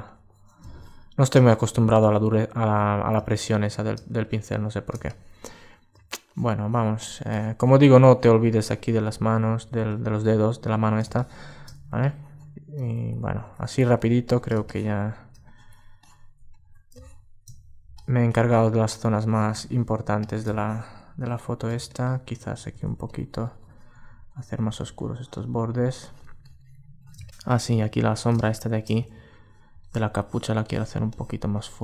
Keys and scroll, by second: 16.0 alt+space, 21.4 super+space, 27.3 super+space.